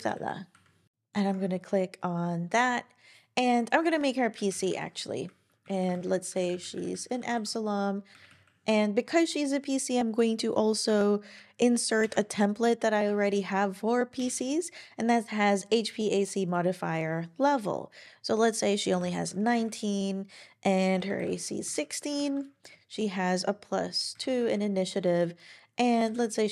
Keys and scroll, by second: 0.0-0.9 typing, 4.2-5.1 typing, 5.3 Down, 5.9 super+Right, 6.3 shift+a, 8.1 Up, 8.1 typing, 8.3 Up, 12.0 super+;, 12.8-13.7 typing, 18.7-19.5 typing, 19.5 Down, 20.9-21.7 typing, 21.7 Down, 22.1 super+Right, 24.1 2, 24.4 Down, 26.0 2.